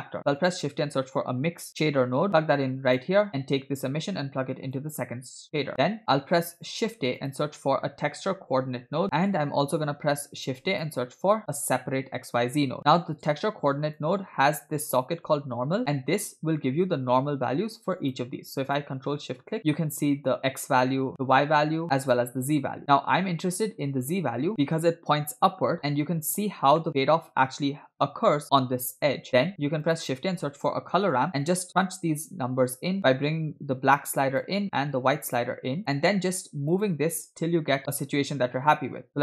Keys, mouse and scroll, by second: 0.2 shift+a, 4.0-5.6 drag, 5.7 drag, 6.0 middle click, 6.0 scroll down 1, 6.8 shift+a, 9.0 scroll down 1, 9.1 middle click, 10.3 shift+a, 13.3 click, 15.3-16.1 drag, 18.0 click, 19.0 ctrl+shift+click, 21.1 ctrl+shift+click, 22.3 ctrl+shift+click, 24.5 click, 24.5 scroll down 3, 26.4-27.5 scroll up 3, 26.9 shift+middle click, 29.4 shift+a, 33.1-34.5 drag, 35.3-36.9 drag, 38.6 click, 39.1-39.2 scroll up 7.